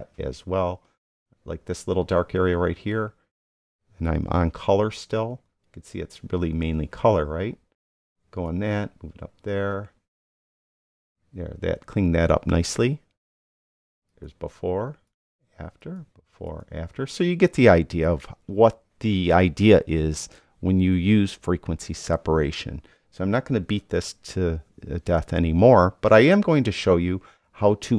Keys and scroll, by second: 10.8 super+d, 23.6 super+0.